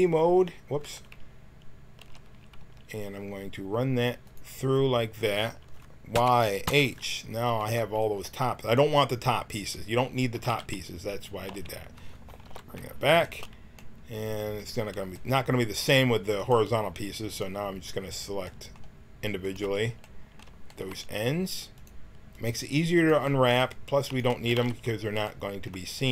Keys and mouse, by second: 0.8 Tab, 1.9 a, 2.5 c, 6.1 y, 6.6 h, 7.5 b, 10.3 x, 11.4 z, 12.4 alt+h, 16.3-26.1 drag, 24.4 x.